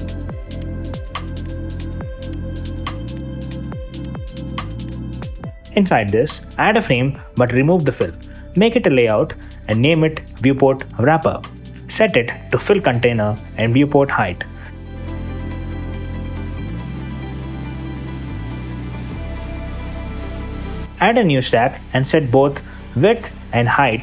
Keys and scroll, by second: 2.5 2, 2.8 super+a, 3.8 BackSpace, 4.2 Return, 9.9 space, 11.0 Return, 13.3 h, 18.2 h, 19.0 Return, 23.0 f.